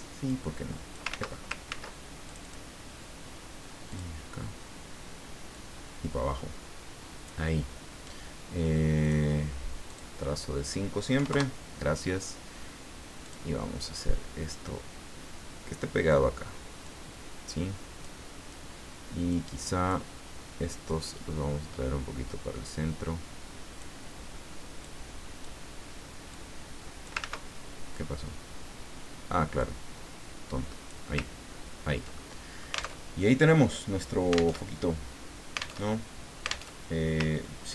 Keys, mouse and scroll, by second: 0.3 click, 1.1 ctrl+z, 2.2 ctrl+click, 3.9 click, 5.5-7.5 drag, 9.0 click, 9.8 click, 11.1 KP_5, 11.3 KP_Enter, 13.2 click, 14.5-16.1 drag, 16.8-18.2 drag, 19.3-20.3 drag, 20.8-24.0 drag, 24.8 click, 26.3 click, 27.2 ctrl+z, 29.6-31.1 drag, 31.4-31.8 ctrl+scroll down 2, 32.3 ctrl+click, 33.1 alt+Tab, 34.5 alt+Tab, 35.9 alt+Tab, 36.7 alt+Tab, 37.4-37.7 ctrl+scroll up 2.